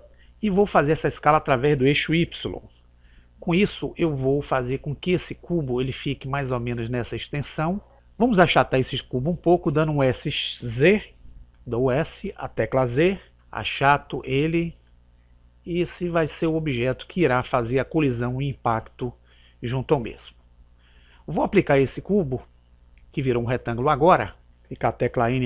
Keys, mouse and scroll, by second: 11.7 s.